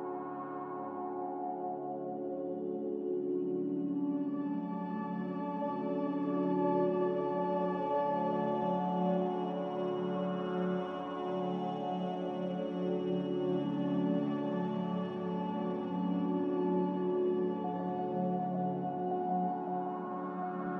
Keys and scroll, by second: 1.9 ctrl+z, 2.5 ctrl+z, 8.5 z, 11.2 5, 11.2 0, 11.5 Return, 12.0 b, 18.2 typing, 18.7 Return.